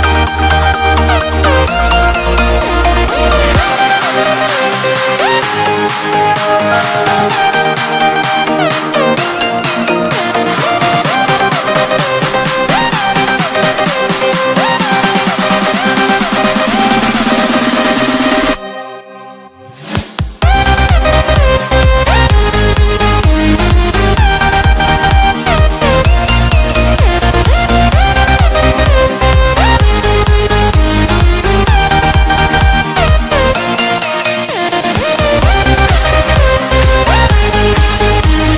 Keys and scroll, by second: 3.8 t, 4.2 Escape, 5.0 F3, 21.3 F2, 27.1 ctrl+g, 28.7 ctrl+g, 29.8 ctrl+g, 30.6 c, 31.0 Escape, 34.4 shift+F2, 35.1 Escape, 37.9 ctrl+r.